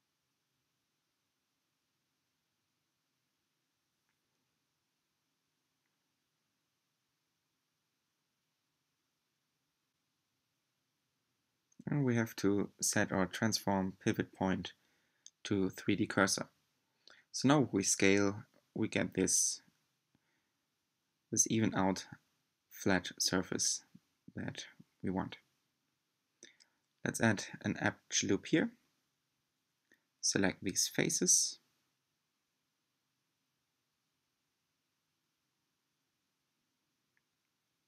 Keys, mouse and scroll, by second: 5.5-8.3 middle drag, 8.3 s, 13.4-15.9 drag, 15.9 s, 21.5 scroll down 1, 22.0-25.6 middle drag, 26.0 r, 29.7 3, 30.8 c.